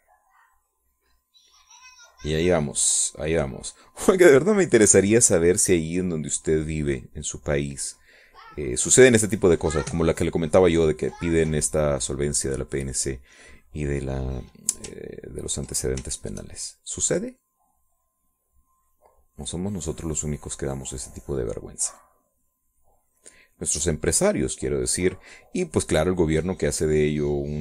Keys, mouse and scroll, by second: 0.1-5.7 drag, 6.1-9.6 drag, 9.7 click, 10.5 click, 11.2-13.5 drag, 14.5 middle click, 17.0 ctrl+click, 17.7 shift+click, 18.0-22.5 shift+drag, 22.8-27.6 drag.